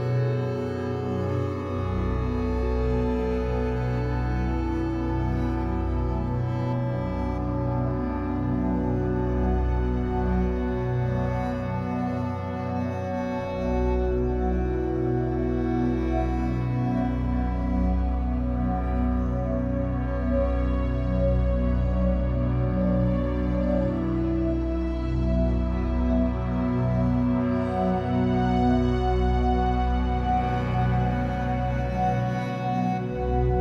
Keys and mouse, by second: 2.0 click, 2.7 click, 4.4 click, 5.4 click, 7.8 click, 8.9-10.6 ctrl+shift+drag, 11.2 click, 11.8 click, 14.4 shift+click, 15.4 click, 17.3-19.9 drag, 19.9 BackSpace, 20.1 BackSpace, 20.3 1, 20.5 Return, 22.0-25.5 ctrl+shift+drag, 25.5 ctrl+d, 26.2 ctrl+shift+click, 28.1 click, 28.9 click, 29.1 click.